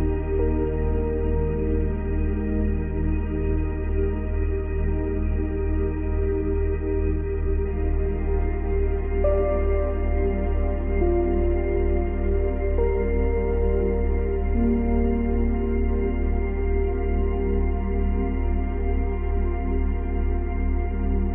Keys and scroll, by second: 20.7 space.